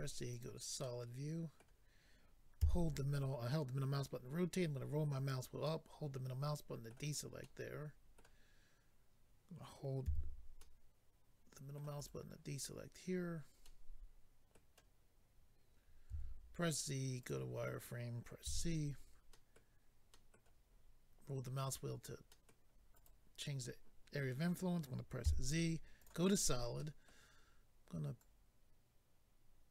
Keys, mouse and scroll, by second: 0.3 click, 0.8 middle click, 2.6 c, 4.1-4.6 scroll down 4, 5.6 middle click, 7.0 right click, 7.1 right click, 7.4 middle click, 8.2 middle click, 10.6 middle click, 10.6 c, 12.0 right click, 13.6 middle click, 17.2 click, 17.2 z, 18.4 c, 19.3 middle click, 20.1 middle click, 20.7-21.3 scroll up 3, 22.3 middle click, 23.0 right click, 23.6 middle click, 26.0 click, 26.0 z, 26.8 middle click, 28.2 click.